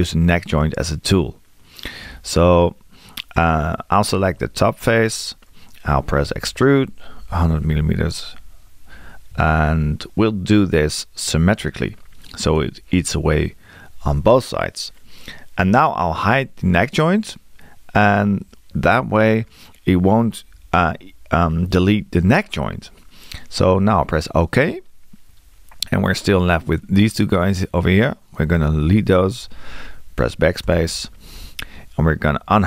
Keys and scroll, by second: 6.3 e.